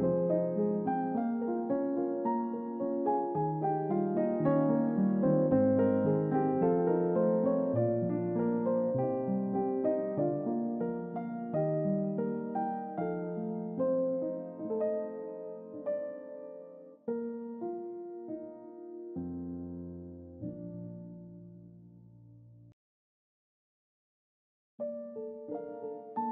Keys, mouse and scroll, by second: 0.4-1.7 middle drag, 2.1-2.7 middle drag, 3.5-6.1 drag, 7.5-11.6 drag, 12.0 middle click, 12.3 ctrl+middle click, 13.3-14.3 shift+middle drag, 16.0-22.5 drag, 23.0 click, 25.2-26.3 drag.